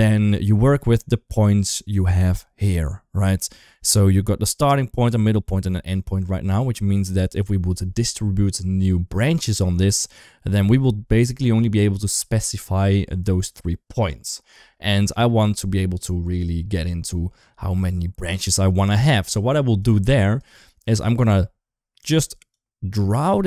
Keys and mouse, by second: 0.4 Tab, 14.8 Tab, 18.2-18.7 middle drag, 19.7 click, 20.4 middle click, 22.4 click, 22.7-23.4 drag.